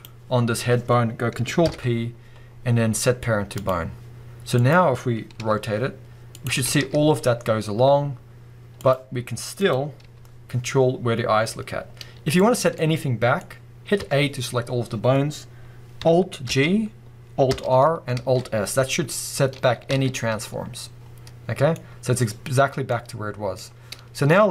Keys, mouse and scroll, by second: 1.6 ctrl+p, 4.6 click, 5.0 scroll down 1, 5.4 r, 6.4 right click, 6.6 r, 8.9 click, 9.6 click, 10.0 g, 12.5 click, 12.7-24.5 middle drag, 14.0 a, 16.5 alt+g, 17.5 alt+r, 18.2 alt+s, 19.9 alt+a.